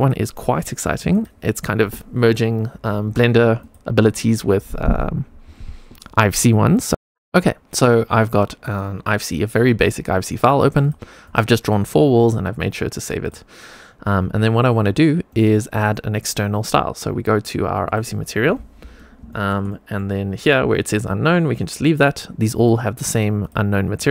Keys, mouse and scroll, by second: 1.0 click, 3.5 click, 6.9 click, 8.2 middle click, 9.4-10.4 middle drag, 10.7-11.2 drag, 11.5 click, 13.1 click, 15.2 middle click, 15.7 click, 17.8 click, 19.2 shift+middle click, 19.6 middle click, 19.8 click, 22.5 click, 22.9 click, 24.0-24.1 drag.